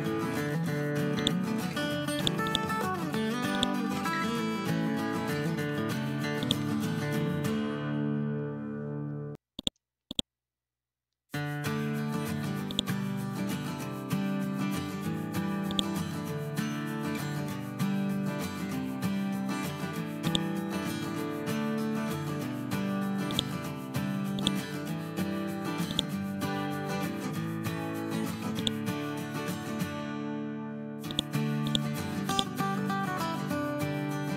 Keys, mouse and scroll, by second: 1.1 click, 2.4 right click, 3.5 click, 6.3 shift+click, 7.9 r, 9.5 click, 10.0 right click, 12.6 click, 15.6 shift+click, 17.3 b, 18.8 c, 20.2 click, 23.2 click, 27.1 ctrl+z, 28.5 click, 29.2 ctrl+z, 31.0 click.